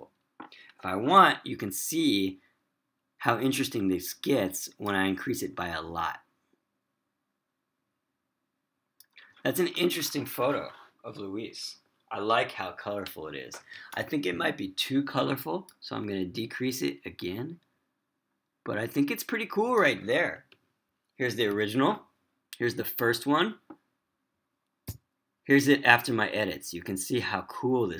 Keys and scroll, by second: 20.9 Page_Down, 25.2 Up.